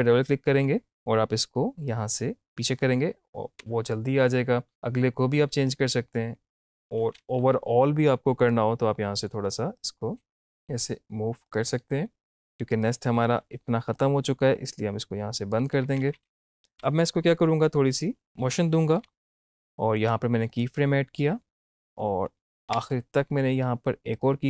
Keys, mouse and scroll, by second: 1.9-3.6 drag, 3.6 space, 5.5 space, 5.7-7.4 drag, 8.1-11.5 drag, 13.0 =, 13.2 =, 14.0-15.8 drag, 15.8 -, 15.9 -, 16.7 -, 16.7 Up, 17.7 space, 18.9 Up, 20.5 click, 22.3 Down, 22.6 Left, 24.1 click.